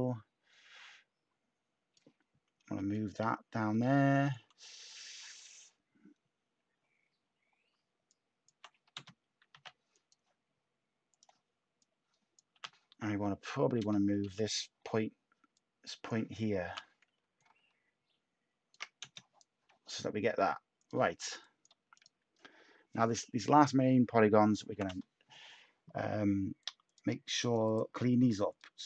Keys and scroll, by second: 9.5 /, 12.5 t, 14.2 /, 16.6 t, 24.7 ctrl+k.